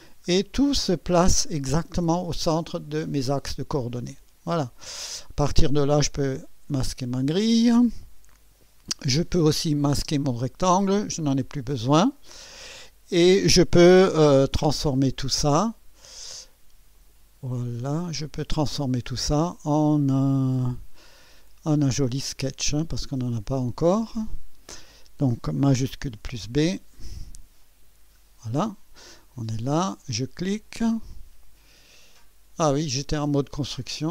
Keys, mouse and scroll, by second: 0.3-1.5 scroll down 6, 4.1 click, 6.2 click, 9.5 click, 10.0 space, 16.9 click, 18.1 click, 22.2 click, 23.0 click, 25.9 shift+b, 26.6-28.0 shift+drag, 30.5 click.